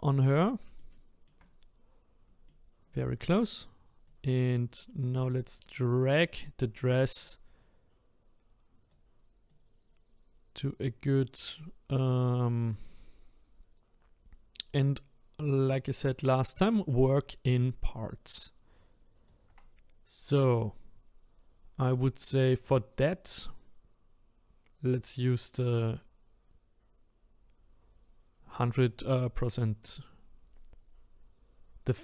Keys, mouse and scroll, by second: 0.8 shift+middle click, 1.5-2.2 scroll up 1, 2.5-4.0 shift+middle drag, 4.0-12.5 right drag, 12.8-16.0 shift+right drag.